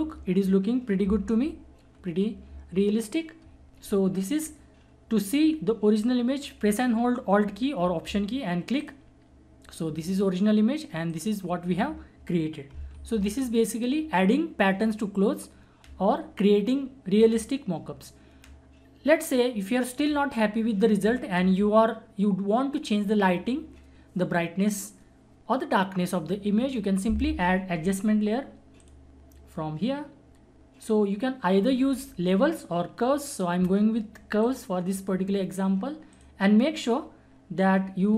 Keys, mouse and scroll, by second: 1.2 -, 8.3 ctrl+-, 8.8 alt+click, 12.9 =, 28.8 click, 34.4 click, 34.4 click.